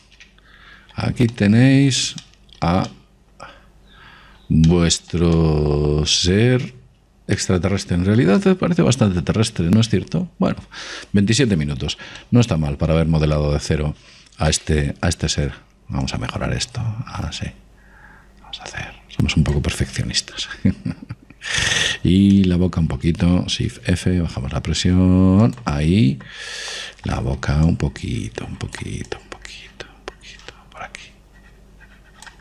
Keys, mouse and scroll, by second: 1.4 KP_5, 6.8-8.4 middle drag, 8.7-10.4 middle drag, 13.5-15.1 middle drag, 15.3 middle click, 17.4 click, 22.8-23.7 scroll up 1, 23.7-25.4 middle drag, 25.0 shift+f, 27.2-31.5 middle drag, 29.0-32.2 drag.